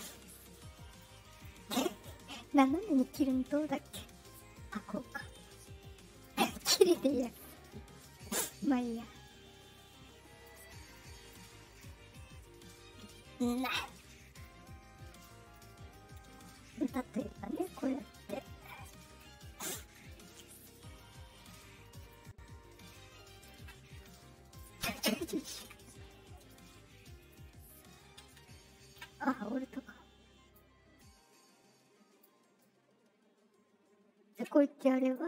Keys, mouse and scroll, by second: 0.0 shift+click, 0.3-1.4 shift+right drag, 1.7-6.2 shift+drag, 9.2-10.4 drag, 10.9 click, 11.7-13.5 shift+drag, 14.4 click, 15.5-19.1 drag, 20.0 click, 21.4 shift+click, 22.9 shift+click, 23.9 click, 24.1 click, 26.3 right click, 27.1 right click, 28.2 shift+click, 29.3-30.5 drag, 30.9-32.1 drag, 32.5-34.3 drag, 34.9 click.